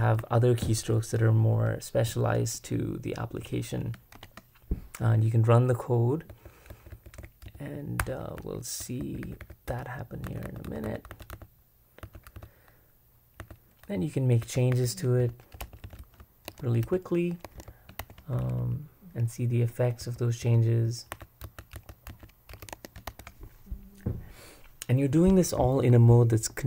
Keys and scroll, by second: 0.0-0.7 typing, 4.1 shift+x, 6.0-16.5 typing, 17.5 Escape, 17.5-18.6 typing, 20.0-23.0 typing.